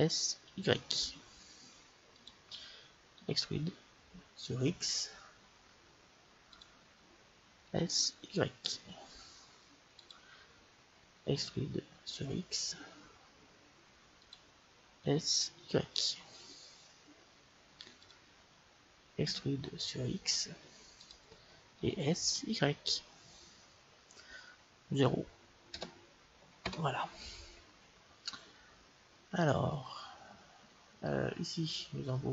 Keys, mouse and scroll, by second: 3.1 e, 7.6 s, 11.2 e, 14.9 s, 19.2 e, 21.7 s, 28.1-30.0 middle drag, 32.0-32.3 middle drag.